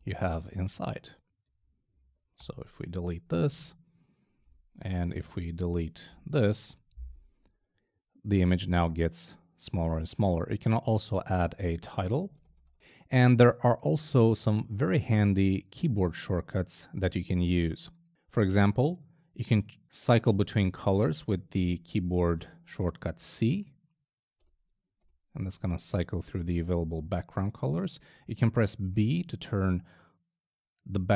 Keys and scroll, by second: 0.7 shift+BackSpace, 1.6 shift+Down, 2.4 shift+BackSpace, 3.3 BackSpace, 5.1 Up, 5.7 shift+Down, 6.1 shift+BackSpace, 7.0 BackSpace, 12.0-13.1 typing, 24.4 c, 29.0 b.